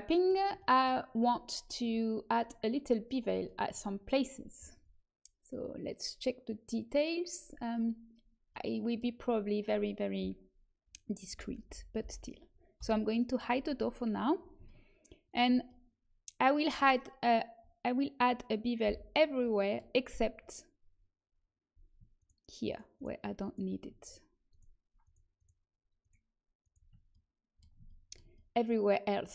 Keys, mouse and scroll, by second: 8.4-11.2 middle drag, 11.3 l, 11.6 l, 12.0 l, 12.7 h, 18.8 l, 19.3-21.5 middle drag, 22.1-27.0 right drag, 27.0-28.5 middle drag.